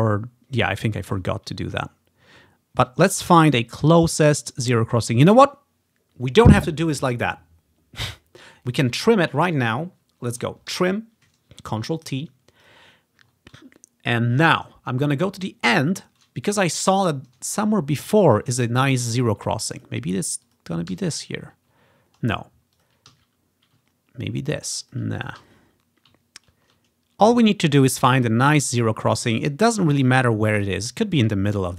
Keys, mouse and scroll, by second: 0.3-0.7 ctrl+scroll down 3, 2.0 ctrl+scroll up 1, 2.5-3.1 ctrl+scroll down 2, 3.8 ctrl+scroll down 2, 5.0 ctrl+scroll down 3, 9.0-10.5 scroll down 1, 10.8 ctrl+t, 12.7-14.7 drag, 14.3 ctrl+scroll up 1, 16.3-18.3 scroll up 1, 18.3-19.6 drag, 19.8-21.4 drag, 21.0 z, 22.9 click, 23.2 ctrl+t, 23.9 ctrl+click, 24.1-24.4 ctrl+scroll up 2, 24.4 ctrl+scroll down 2, 24.5-26.5 ctrl+drag, 25.5 z, 26.5-27.5 ctrl+scroll down 1, 27.9-30.7 drag, 28.2 z, 28.9-29.5 ctrl+scroll down 1, 29.8 z, 30.0 ctrl+scroll up 1, 30.9-31.5 scroll down 3.